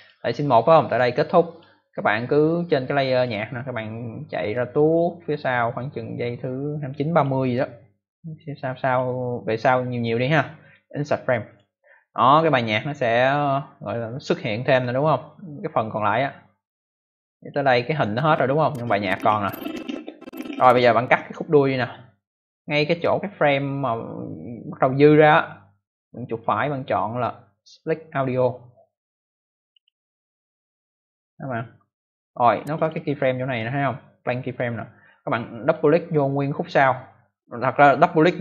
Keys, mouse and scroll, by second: 0.8 click, 3.1 click, 4.4 click, 8.8 click, 10.5 right click, 11.4 click, 13.8 click, 15.5 click, 17.9 click, 23.2 click, 26.2 right click, 29.6 click, 32.5 click, 35.6 click, 38.2 click.